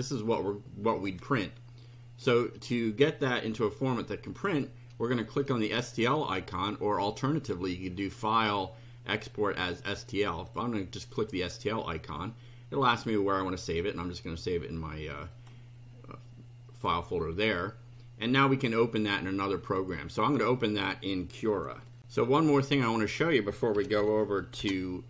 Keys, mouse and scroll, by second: 0.1-1.2 shift+right drag, 7.8 click, 10.4 click, 11.1 click, 13.8 click, 15.3 click, 22.0 ctrl+r, 23.5-24.5 typing.